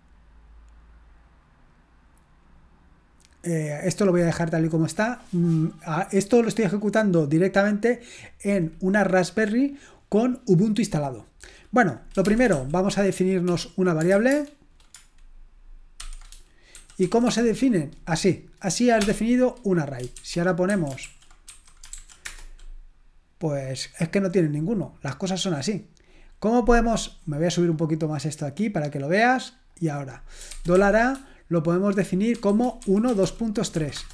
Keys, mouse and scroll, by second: 13.8-14.6 typing, 15.8-17.0 typing, 20.5-22.4 typing, 27.7-29.7 scroll down 1, 29.7-31.6 scroll down 1, 31.6-32.4 scroll down 1, 32.1-33.8 typing, 33.9 Return.